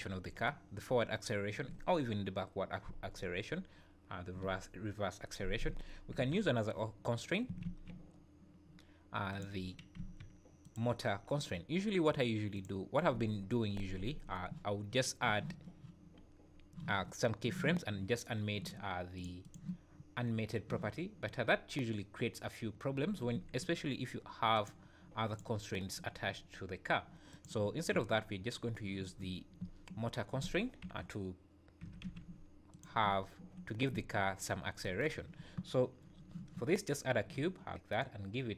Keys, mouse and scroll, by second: 6.2 KP_1, 7.6 shift+a, 9.9 s, 12.5 click, 19.1 click, 19.4 click, 21.1 scroll up 2, 23.3 `, 24.5 click, 25.3 click, 27.9 `, 29.6 `, 30.8 KP_7, 31.8 g, 33.0 `, 33.7 scroll up 3, 34.4-34.8 scroll down 3.